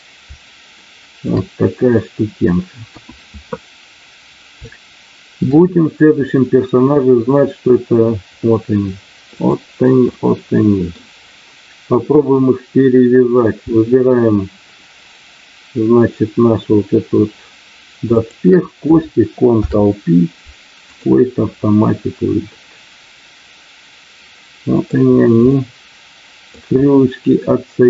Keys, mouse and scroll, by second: 0.7 shift+middle click, 2.8 KP_1, 4.6 shift+middle click, 6.3-7.9 middle drag, 9.4 click, 10.1 middle click, 19.4 ctrl+p, 22.4-24.8 middle drag, 25.6 middle click.